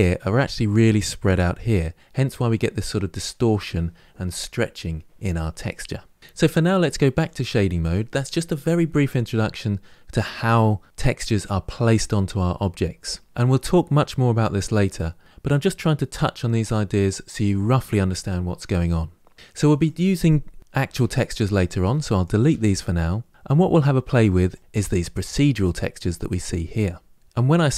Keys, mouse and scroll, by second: 7.1 click, 19.7 click, 20.7 Delete, 21.3 click, 21.7 Delete, 22.1 click, 22.3 Delete, 24.4 click.